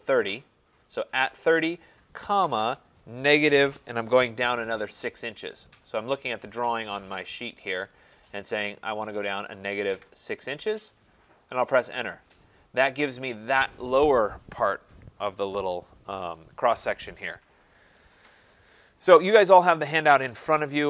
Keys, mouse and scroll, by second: 2.2-3.8 typing, 10.0 typing, 12.0 Return, 20.2 click.